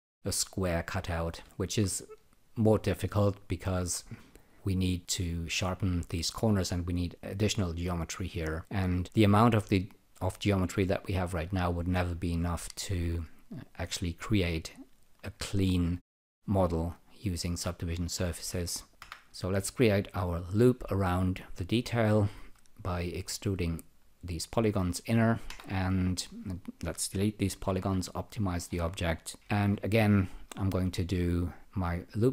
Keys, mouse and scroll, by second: 1.6 alt+right click, 4.2 alt+click, 8.0 alt+click, 15.3 alt+click, 19.8-22.0 drag, 25.5 Delete, 27.6 n, 27.8 n, 28.5-29.4 scroll up 3, 29.2-30.0 typing, 30.5 alt+click.